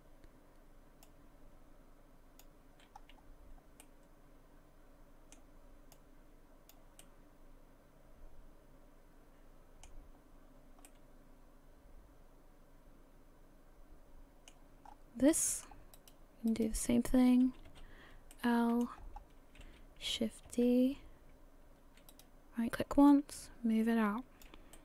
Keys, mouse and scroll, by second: 1.0 click, 3.0-3.8 scroll up 2, 3.8 middle click, 5.9 click, 7.0 middle click, 10.3 scroll down 2, 10.9 middle click, 14.9-16.0 scroll up 3, 15.3 middle click, 16.0 right click, 16.5 right click, 17.7 l, 18.3 middle click, 19.0-20.1 scroll down 2, 20.7 shift+d, 23.1 click, 24.7 middle click.